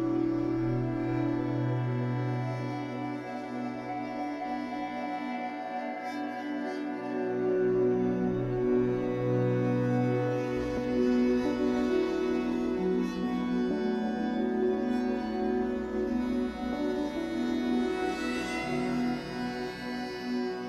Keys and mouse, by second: 0.0 click, 1.2 click, 2.5 click, 3.8-6.4 drag, 9.2-11.1 drag, 11.3-12.2 typing, 15.1 click, 15.4 click, 16.9 click, 18.8 click, 19.6 click.